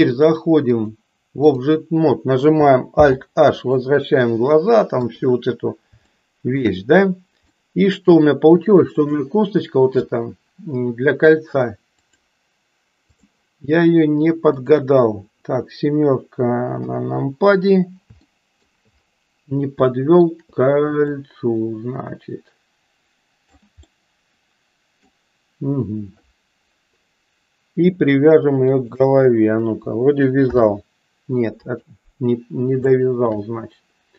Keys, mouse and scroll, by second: 0.8 click, 2.9 alt+h, 5.0 KP_3, 6.2 shift+middle click, 7.4 middle click, 8.9 click, 11.9-13.3 drag, 16.7 KP_7, 18.3 shift+middle click, 19.9 shift+middle click, 20.9-23.6 drag, 23.8-25.2 middle drag, 28.6 shift+click, 30.4 ctrl+p, 32.9 shift+middle click.